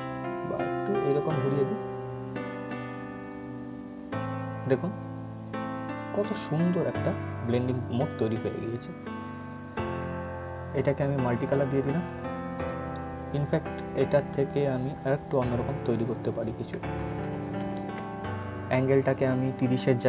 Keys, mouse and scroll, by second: 9.2 right click, 11.1 click, 11.7 scroll down 1, 12.3-15.3 drag, 16.6 ctrl+z, 18.8 click.